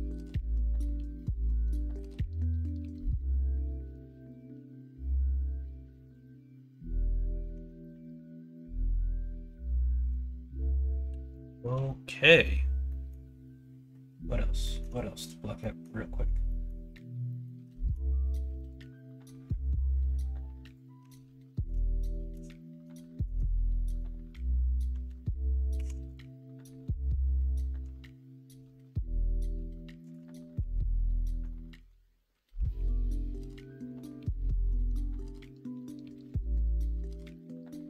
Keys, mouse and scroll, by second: 0.8-1.4 scroll up 1, 2.3 ctrl+b, 6.4 middle click, 7.0 middle click, 7.6 Tab, 8.1-9.2 middle drag, 9.7 middle drag, 10.2 middle drag, 10.7 middle drag, 11.0-11.6 shift+middle drag, 12.0 middle click, 17.3 middle click, 18.0 shift+middle click, 18.4 middle click, 21.0 Tab, 21.5 middle click, 21.8 middle click, 22.9 middle click, 23.6 middle click, 25.7 ctrl+r, 31.5 middle click, 32.7 3, 33.3 middle click, 35.5 middle click, 36.1 e.